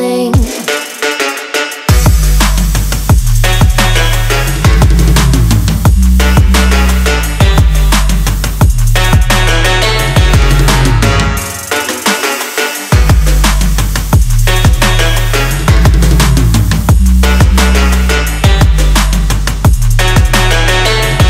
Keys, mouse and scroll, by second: 3.9 Down, 8.3 click, 9.9 click, 11.6-16.7 middle drag, 16.7-21.2 drag.